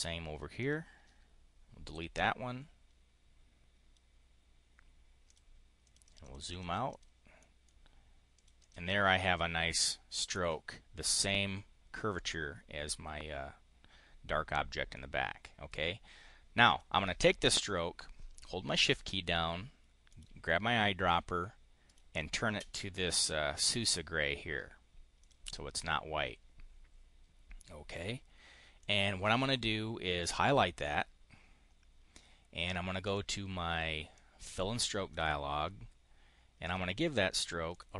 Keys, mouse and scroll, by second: 0.4 click, 1.7 Delete, 5.1 click, 5.7 click, 5.9 click, 6.2 click, 6.8 click, 7.2 click, 8.2 click, 14.8 right click, 16.4 click, 20.0 shift+click, 21.7 shift+click, 25.0 click, 28.6 click, 32.9 click, 34.0-35.1 drag, 36.5 click, 37.6 click.